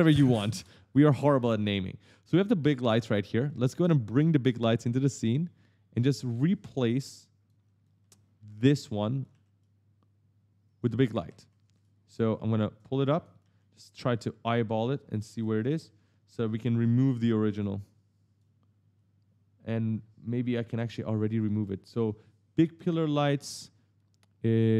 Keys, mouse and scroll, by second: 0.4 Return, 2.6 right click, 3.5 ctrl+space, 4.1 click, 7.6-10.6 typing, 7.6 right click, 9.0 right click, 10.6 right click, 12.6 click, 13.2 right click, 14.7 click, 15.4 right click, 17.0 click, 21.3 click, 22.5 click.